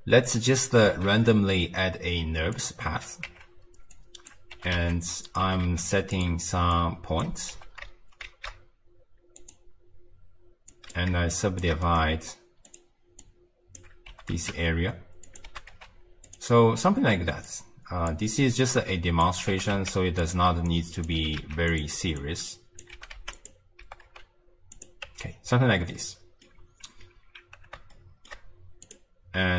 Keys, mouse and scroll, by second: 1.1 shift+a, 3.2 Tab, 3.9 click, 4.5 g, 5.4 g, 6.7 click, 7.5 g, 10.7 click, 11.3 shift+click, 11.8-13.2 right drag, 13.2 click, 14.1 g, 15.5 g, 16.5 middle click, 17.5 click, 18.7 click, 19.5 g, 20.7 click, 21.1 g, 22.2 click, 22.9 g, 23.8 g, 25.0 Tab, 26.0-28.8 middle drag, 28.8 click.